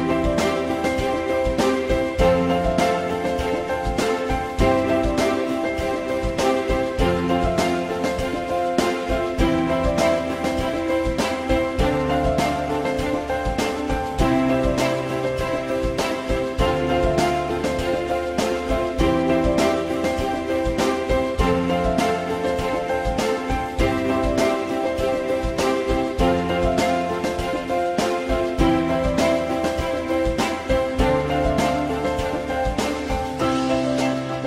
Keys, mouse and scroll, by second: 7.7 ctrl+z.